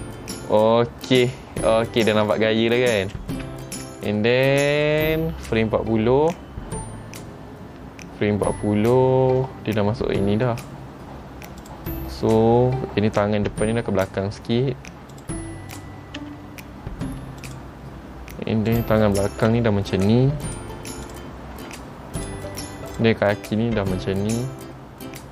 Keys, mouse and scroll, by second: 4.1 shift+middle click, 5.4-6.5 scroll down 1, 11.0-11.8 scroll up 2, 11.8 click, 13.6 r, 15.9 click, 16.3 r, 18.8 click, 19.5 r, 21.2 click, 21.7 r, 23.1 click, 23.8 r.